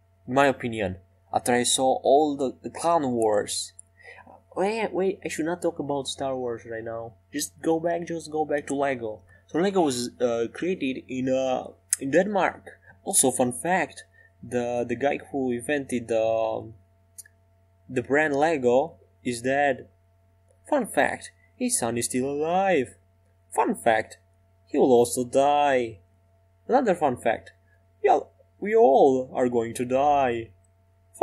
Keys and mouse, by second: 20.2-22.0 middle drag, 24.2 e, 24.7 s.